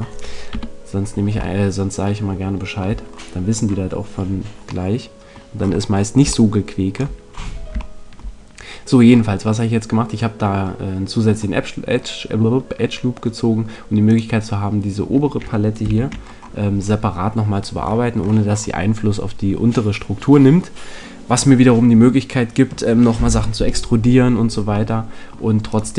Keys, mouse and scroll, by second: 0.5 KP_1, 14.0-15.9 right drag, 15.9 ctrl+l, 24.8 middle click, 25.7 right click.